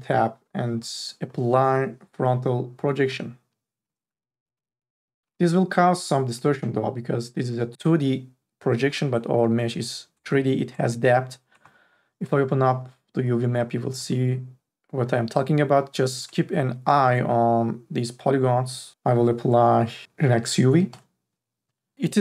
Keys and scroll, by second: 4.8 t, 5.2 e, 6.3 t, 7.4 e.